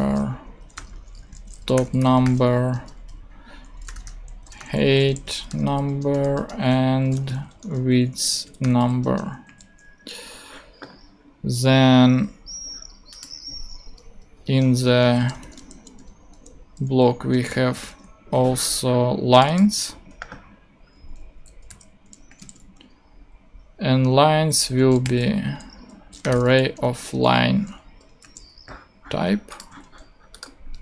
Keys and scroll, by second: 0.0-9.4 typing, 0.0 Return, 14.4 Return, 15.1 l, 15.4 n, 16.0 BackSpace, 17.8 super+Tab, 19.6 super+c, 19.8 super+Tab, 21.3 shift+super+Left, 21.7 shift+super+v, 22.3 shift+super+;, 22.4 shift+space, 25.0-28.2 typing, 27.8 Right, 29.7 super+d.